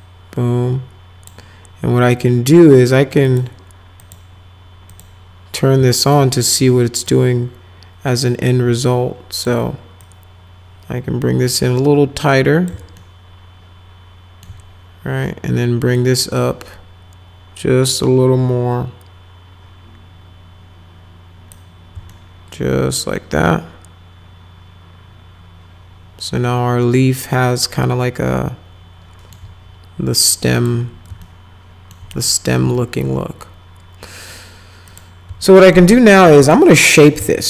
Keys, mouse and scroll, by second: 3.3 click, 4.0 click, 4.9 click, 5.9 alt+middle click, 7.1-9.4 drag, 10.0-12.7 drag, 13.0-14.4 alt+middle drag, 16.0-21.5 drag, 22.1-29.3 alt+middle drag, 30.5 click, 31.2 alt+middle click, 32.1 click, 32.7 alt+middle click, 34.9 click, 35.5 alt+middle click, 35.9 middle click, 36.4 click, 36.9 middle click, 37.2 z.